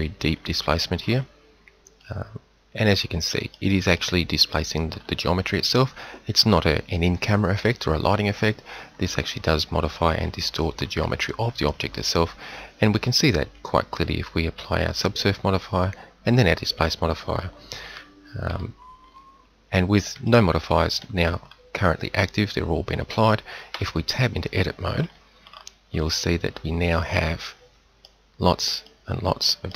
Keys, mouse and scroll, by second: 1.9 middle click, 2.4 middle click, 3.0 middle click, 5.8 middle click, 6.0-7.3 middle drag, 8.7 middle click, 9.2 middle click, 9.8 middle click, 11.5 middle click, 18.3 KP_7, 23.9 Tab, 25.4 middle click, 26.0-27.5 middle drag, 29.0 middle click, 29.2 middle click.